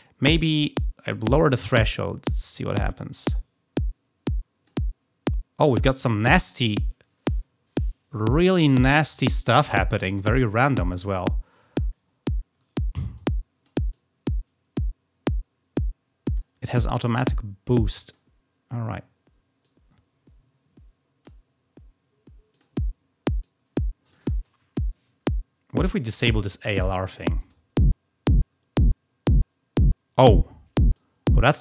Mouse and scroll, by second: 1.2-4.7 drag, 13.1-13.6 drag, 13.8-16.3 drag, 18.0 click, 19.5-21.2 drag, 22.4 click, 23.4-24.1 drag, 27.3 click, 30.9-31.3 drag.